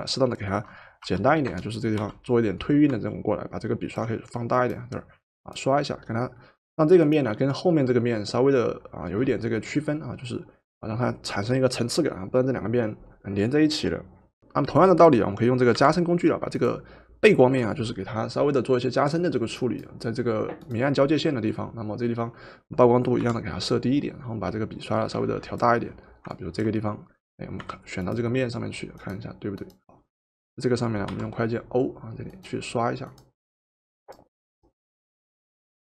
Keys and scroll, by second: 1.0 o, 1.9 o, 15.7 v, 23.2 4, 27.7 v, 31.1 o.